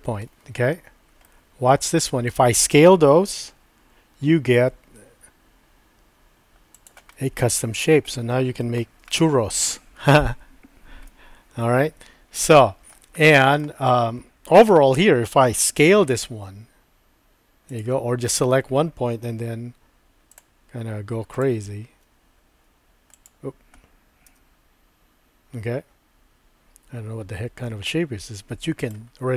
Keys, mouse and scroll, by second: 1.2-2.3 middle drag, 3.5 s, 7.1 middle click, 8.1 ctrl+middle click, 9.1 shift+middle click, 11.2-12.9 middle drag, 12.4 click, 12.9 scroll down 1, 13.2 shift+middle click, 14.7 a, 15.6 s, 17.7 click, 20.3 click, 21.9 r, 24.3 g.